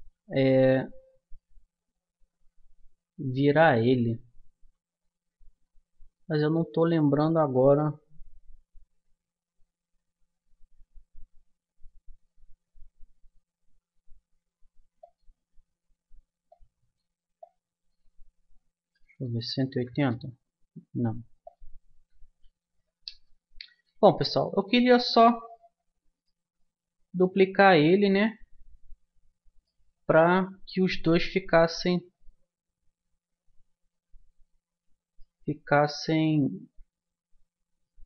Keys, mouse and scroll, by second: 15.0-16.8 drag, 21.4-23.2 drag, 24.4-28.5 middle drag, 30.4-34.2 middle drag.